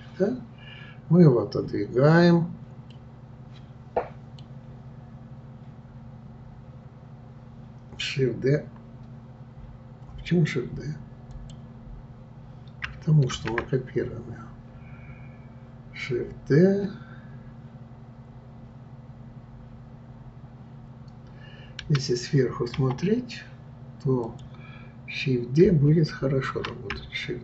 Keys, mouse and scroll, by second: 2.9-6.0 middle drag, 11.3 click, 13.3 shift+d, 22.7 KP_7, 24.2 click.